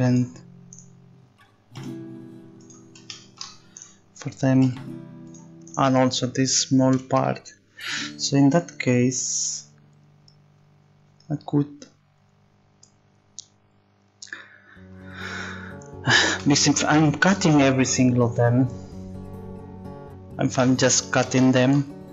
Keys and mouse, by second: 0.0-2.6 right drag, 0.7-2.0 drag, 2.0 g, 3.8-5.4 right drag, 4.6 g, 5.7 right click, 5.9 g.